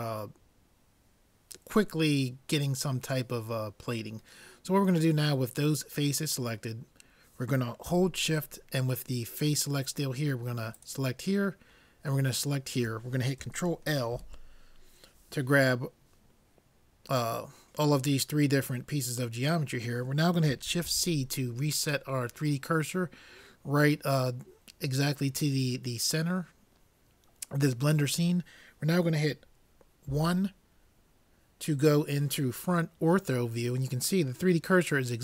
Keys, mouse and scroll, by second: 5.3-7.5 middle drag, 10.7-14.1 drag, 14.1 ctrl+l, 20.9 shift+c, 30.1 KP_1.